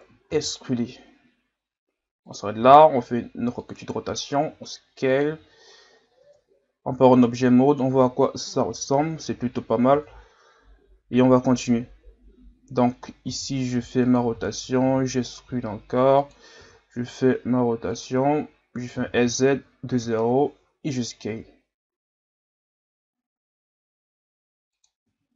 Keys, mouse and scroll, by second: 0.3 e, 2.6 r, 3.9 s, 5.5 scroll down 4, 6.2 Tab, 7.6-8.1 scroll up 2, 8.7-9.9 scroll up 2, 9.9 Tab, 10.8-13.3 scroll up 2, 13.3 r, 14.4 scroll down 1, 14.9 e, 16.6 r, 18.9 s, 21.2 s, 25.0 Tab.